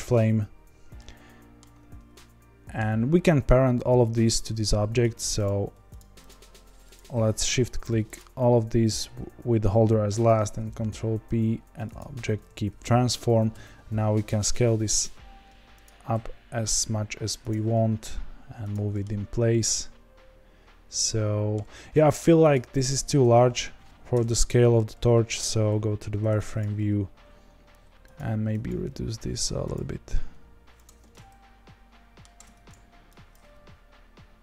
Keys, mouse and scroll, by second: 0.9-4.3 shift+middle drag, 4.3 click, 5.0 click, 5.9 shift+click, 6.2 shift+click, 8.1 shift+click, 11.9 ctrl+p, 13.5 s, 14.9 click, 15.8 click, 16.1 s, 17.7 g, 18.9 middle drag, 19.1-19.4 scroll down 1, 19.4-22.5 middle drag, 22.5 click, 22.9 Tab, 24.1 KP_0, 24.7-25.7 scroll up 1, 25.7 z, 26.6 click, 26.7 g, 28.6 click, 28.8 g, 29.8 s, 30.8 Tab, 31.1-32.4 middle drag, 32.4 Tab, 33.3 click, 33.5 g.